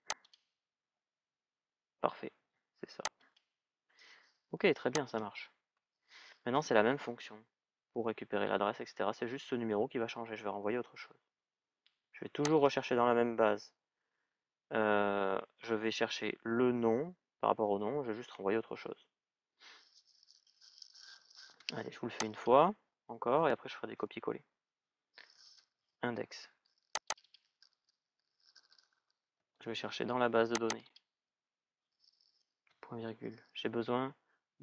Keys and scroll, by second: 21.4 Return.